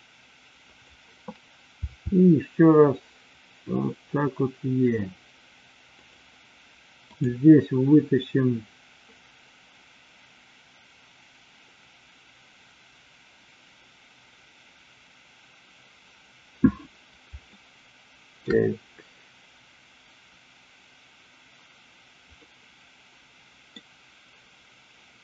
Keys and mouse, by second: 0.7 click, 1.8 e, 5.9 click, 7.0 click, 17.5 shift+middle click, 22.3-23.8 middle drag.